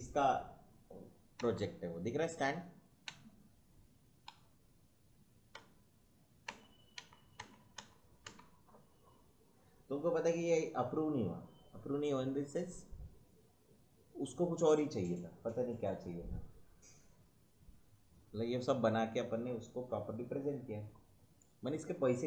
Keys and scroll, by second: 1.3 Right, 3.0 Right.